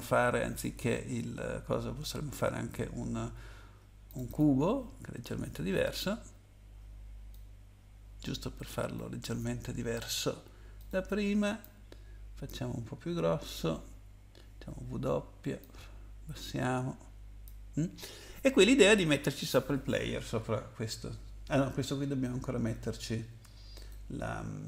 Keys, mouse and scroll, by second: 4.1 click, 4.3 click, 4.3 double click, 7.3 click, 10.8 click, 11.6 click, 14.6 w, 15.6 click, 20.7-21.6 scroll down 2, 23.8 click.